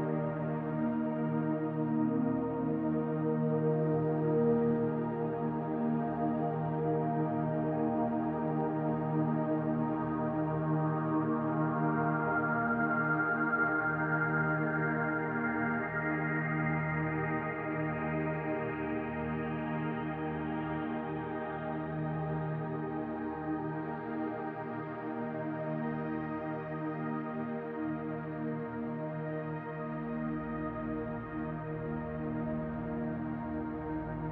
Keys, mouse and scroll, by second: 1.2 shift+middle click, 1.7-2.2 scroll up 2, 2.1 middle click, 3.3 click, 4.3 middle click, 5.3 click, 6.5 middle click, 7.2 scroll down 1, 7.5 shift+middle click, 8.4 click, 8.8 middle click, 9.4-10.2 scroll down 1, 10.7 shift+d, 11.7 click, 13.5 click, 14.7 middle click, 15.2-16.2 shift+scroll up 6, 16.2 shift+middle click, 16.8-17.5 scroll down 1, 17.5 middle click, 17.5 scroll down 1, 18.1 r, 20.3 click, 21.3 middle click, 22.3 shift+d, 22.9 click, 24.2 s, 25.1 middle click, 26.1 click, 27.1 click, 27.7 middle click, 29.4 middle click, 31.5 middle click, 31.5 r, 33.9 shift+d.